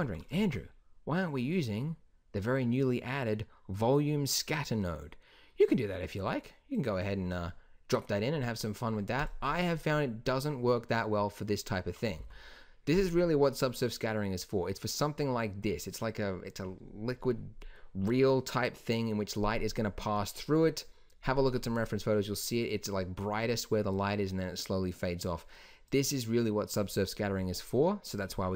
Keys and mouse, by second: 0.3 shift+a, 6.7-8.5 drag, 9.1-11.0 drag, 11.7 middle drag, 12.1 x, 25.8-28.5 drag.